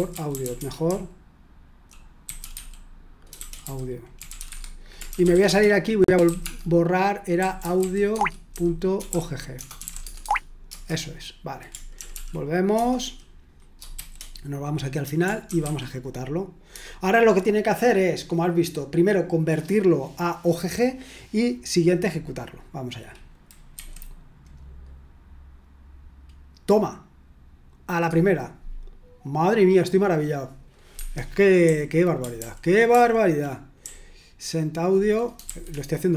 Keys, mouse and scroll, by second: 0.3-16.7 typing, 23.8 F5, 29.8-30.9 scroll up 1, 31.0 Escape, 31.6 k, 32.4 ctrl+u, 32.9 ctrl+u, 33.8-35.5 typing.